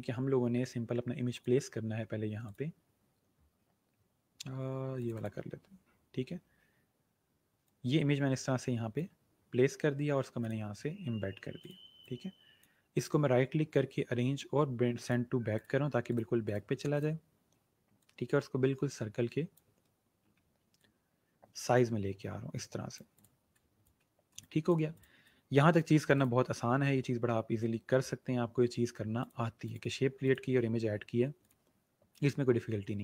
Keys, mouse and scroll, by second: 1.2 click, 4.9 click, 7.5 shift+click, 12.8 right click, 14.9 click, 19.8-20.5 alt+scroll up 3, 20.8 shift+click, 23.4 space, 24.3 click, 29.1 click.